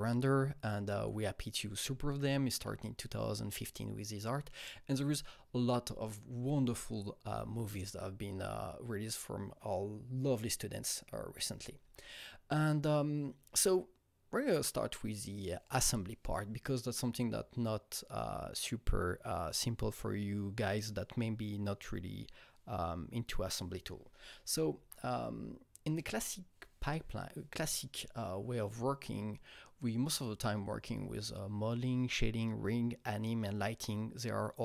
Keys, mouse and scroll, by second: 0.0 Right, 0.8 Right, 2.1 Right, 2.5 Left, 4.5 Right, 5.4 Right, 6.4 Right, 7.2 Right, 11.4 Right.